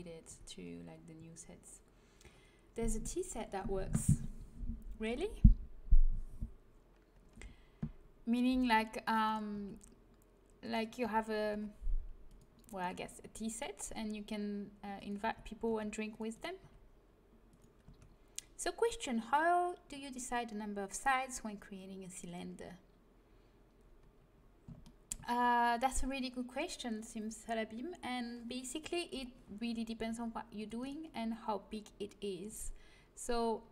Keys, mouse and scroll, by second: 0.2 a, 8.5 c, 9.4 g, 10.9 a, 13.8 g, 15.2 a, 15.6 c, 16.3 middle click, 16.5 g, 17.2-18.4 drag, 17.8 a, 24.8 middle click, 29.9 c, 32.4 g.